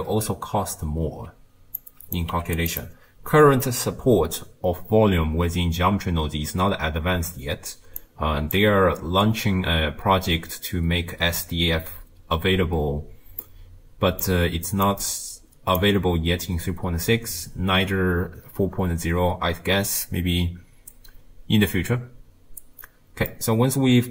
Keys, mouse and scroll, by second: 8.0-23.4 drag, 23.4-24.1 middle drag.